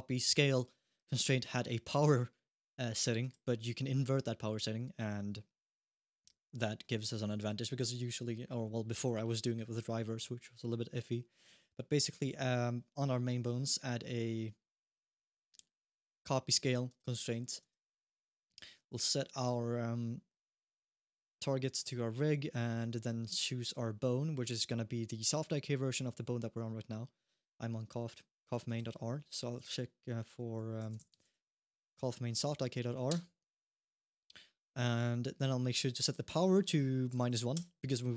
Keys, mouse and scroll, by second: 3.0 click, 8.8 n, 10.2-11.7 scroll up 1, 14.6 click, 17.8 click, 18.1 click, 21.6 click, 28.4 click, 31.5 Down, 31.6 Down, 35.8 click.